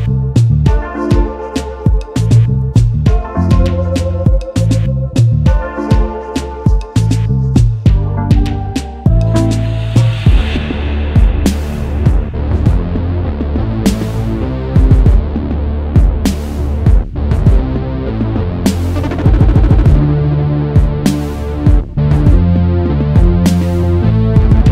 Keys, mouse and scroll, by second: 2.3 double click, 4.4 alt+shift+click, 6.5 double click, 8.3 alt+scroll up 1, 8.4 space, 13.6 alt+shift+click, 15.3 alt+scroll up 1, 16.3 alt+scroll up 1, 18.8 shift+click, 21.6 double click, 24.2 alt+scroll down 1.